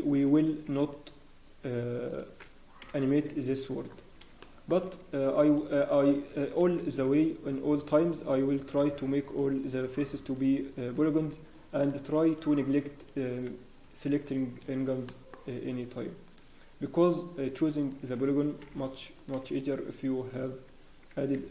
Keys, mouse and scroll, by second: 0.3 click, 0.8 shift+click, 2.8 f, 3.2-4.1 scroll down 6, 3.5 Tab, 3.8 Tab, 3.8 scroll up 1, 4.4 shift+middle click, 4.7-5.3 shift+scroll up 6, 5.4 click, 6.8 g, 9.2 g, 9.6 click, 9.9 g, 10.9 click, 11.1 g, 12.2 click, 12.5 g, 13.3 scroll down 1, 13.8 Tab, 14.1 Tab, 14.2 scroll down 4, 14.5 scroll down 1, 15.1 shift+middle click, 15.4 shift+scroll, 16.2 click, 16.9 shift+click, 18.0 shift+click, 18.6 f, 19.1 click, 19.6 shift+click, 20.8 scroll down 1, 21.3 ctrl+r.